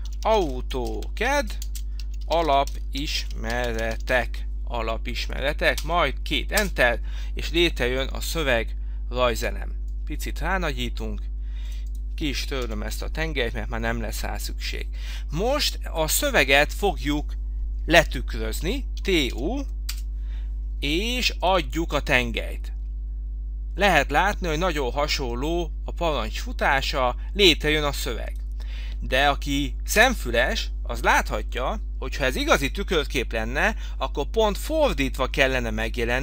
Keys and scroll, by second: 0.0-1.7 typing, 2.9 s, 4.1 k, 5.8 Return, 12.7 Delete, 20.0 Return.